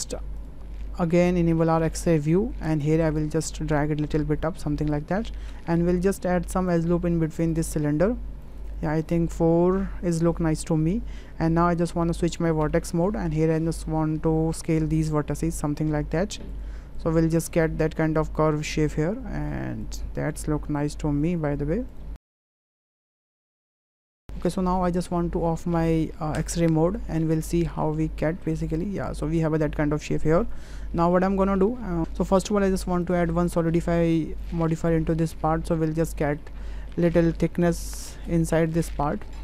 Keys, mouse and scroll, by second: 0.0 shift+middle click, 0.4 click, 1.9 click, 3.4-4.9 drag, 5.5 Tab, 6.7 click, 7.4 click, 8.4 click, 8.6 click, 8.7 click, 10.6 click, 12.7 1, 13.1 click, 14.6 s, 17.0 click, 19.8 click, 20.4 s, 22.1 click, 22.2-23.3 typing, 22.4 click, 22.7 Tab, 22.8 click, 23.0 click, 23.1 Tab, 23.1 click, 23.3 click, 23.5 click, 27.0 Tab, 27.4-27.8 middle drag, 28.8-29.2 middle drag, 29.7-30.2 middle drag, 31.0 middle click, 33.0-34.5 drag, 35.4-36.2 ctrl+middle drag, 36.4-36.8 drag, 39.0-39.4 drag.